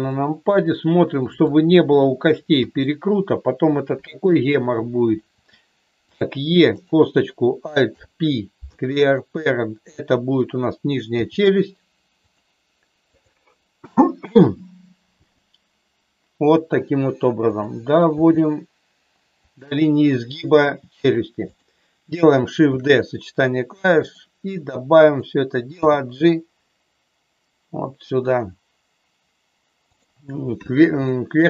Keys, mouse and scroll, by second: 0.0-1.5 middle drag, 1.8 middle click, 2.5 KP_3, 5.3 e, 6.0 click, 6.7 click, 7.8 alt+p, 11.0 g, 12.1 click, 13.0 click, 15.2 g, 16.6 click, 18.0 g, 19.4 click, 22.7 shift+d, 23.9 click, 25.8 g, 31.0 shift+middle click.